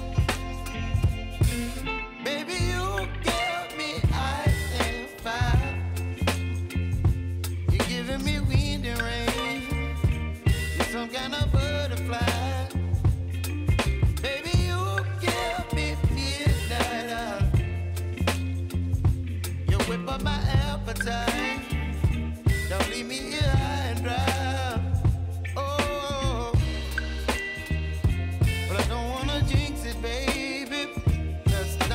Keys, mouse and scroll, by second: 1.2 Right, 3.1 click, 4.1 ctrl+d, 4.7-7.3 drag, 7.3 Left, 12.2-14.9 drag, 20.3 click, 24.2 p, 24.9 click, 25.9 =, 26.9 click, 27.6 =, 28.1-31.5 drag, 31.8 j.